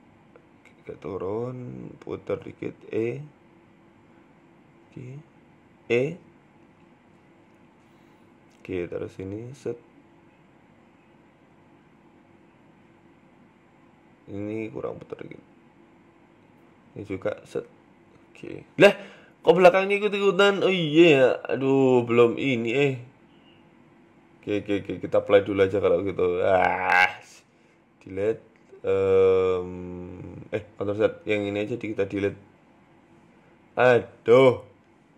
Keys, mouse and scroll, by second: 1.4 s, 1.4 r, 2.0 shift+middle click, 2.4-5.2 typing, 6.1 shift+middle click, 6.7 r, 7.2 s, 8.1 g, 8.9 r, 10.7 click, 11.6 right click, 12.1 right click, 12.3 alt+shift+Right, 13.0 KP_7, 13.5 shift+middle click, 14.2 r, 15.2 right click, 15.4 alt+shift+right click, 16.8 r, 17.7 Tab, 17.9 middle click, 18.3-18.6 scroll down 3, 18.5 middle click, 19.4-19.7 scroll down 2, 19.5 Tab, 20.7 shift+middle click, 21.4 middle click, 24.4 Tab, 25.0 click, 25.4 Tab, 25.7 middle click, 26.5 click, 27.4 Delete, 28.1 middle click, 28.7 click, 30.3 ctrl+z, 30.7 middle click, 31.1 KP_1, 31.8 KP_3, 32.6-33.0 scroll up 2, 33.2 click, 35.0 c.